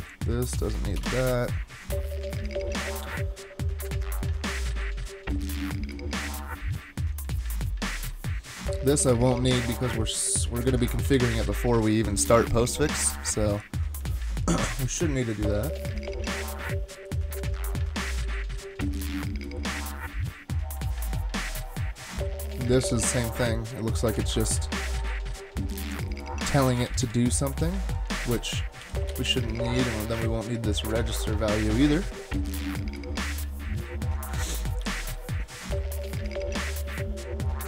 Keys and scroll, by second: 1.0 BackSpace, 11.0 super+/, 24.2 super+Right, 26.5-28.2 typing, 28.8 super+/, 30.1 super+/.